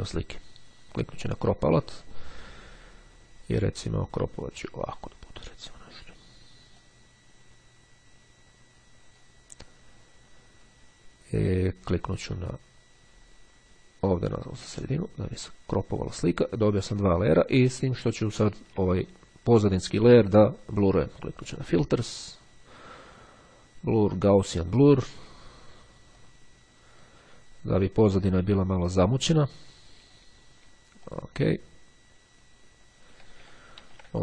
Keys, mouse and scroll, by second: 0.9-2.0 drag, 4.2-5.7 drag, 6.9-9.9 drag, 14.8 click, 17.7-18.4 ctrl+scroll up 2, 19.7 click, 21.8 click, 24.2 click, 26.4-27.7 drag, 28.4 click, 31.2 click, 32.9 ctrl+z.